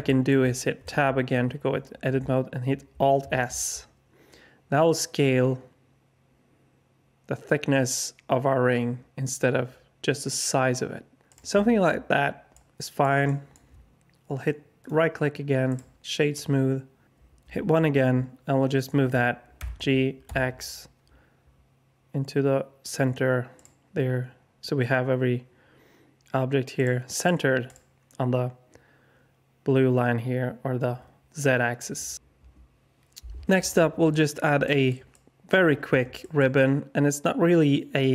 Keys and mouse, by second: 0.0 alt+shift+middle drag, 0.7 Tab, 3.2 alt+s, 11.5 Tab, 12.5-13.0 alt+drag, 13.3 shift+drag, 14.7 click, 17.4 KP_1, 19.5 g, 23.5 click, 26.7 click, 27.2-27.7 drag, 27.7-33.9 middle drag, 34.1-34.4 alt+drag, 34.6 alt+shift+drag, 35.1-35.5 alt+drag, 36.2 alt+shift+click, 36.5 middle click, 36.6-38.1 alt+drag.